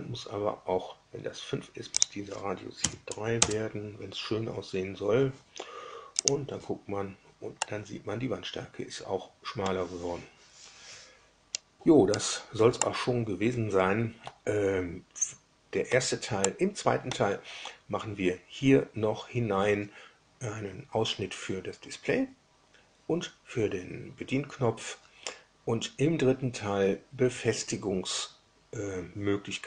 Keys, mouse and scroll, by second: 1.9 click, 2.8 KP_3, 3.4 KP_Enter, 6.1 click, 7.5-9.8 middle drag, 11.4 scroll up 2, 12.0 scroll down 2, 12.7-14.0 middle drag, 14.0-16.0 drag, 16.4-17.2 drag.